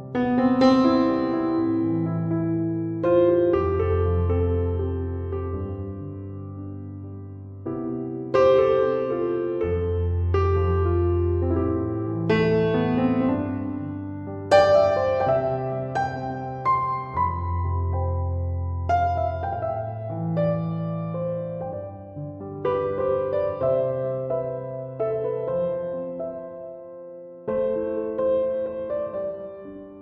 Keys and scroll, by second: 9.0-10.2 typing, 29.8-30.0 typing.